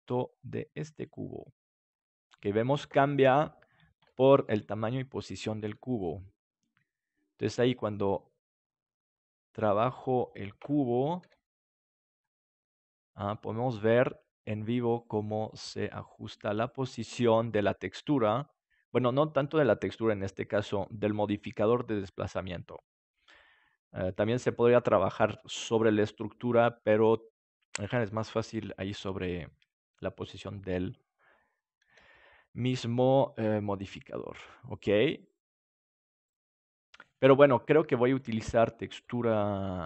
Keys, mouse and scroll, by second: 1.1 click, 1.9 middle click, 6.0 right click, 6.5 s, 10.2-12.0 drag, 11.2 g, 19.9-21.2 drag, 31.9 g, 38.6-39.8 drag.